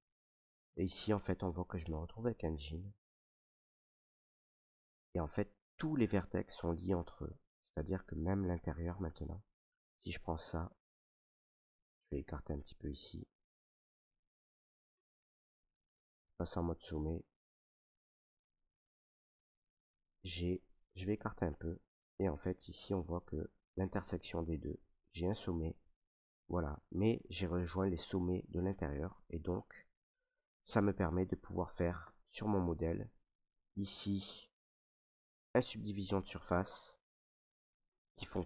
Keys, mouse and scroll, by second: 0.0 shift+middle click, 0.2 middle click, 0.4-1.0 scroll, 1.5-2.6 shift+middle click, 2.7-3.4 shift+middle drag, 3.1-3.4 right drag, 3.5 middle drag, 3.5 right drag, 4.2 middle click, 4.5 middle click, 8.2 shift+middle click, 8.2 shift+middle click, 9.2 middle click, 9.3 middle click, 10.0 shift+middle click, 12.3 middle click, 12.6 middle click, 12.7 middle click, 13.4 shift+middle click, 14.6 Tab, 16.0 click, 17.0 right click, 19.7 g, 20.5 click, 21.2 right click, 21.5 g, 22.8 click, 23.6 middle click, 24.2 right click, 24.5 g, 29.5 right click, 29.9 ctrl+z, 30.3 ctrl+z, 30.6 ctrl+z, 31.0 ctrl+z, 31.9 Tab, 33.0-34.3 drag, 34.3 middle click, 34.4 scroll, 35.3 click, 36.7 click, 37.3-38.0 drag, 37.3 middle click, 38.0-38.4 middle drag.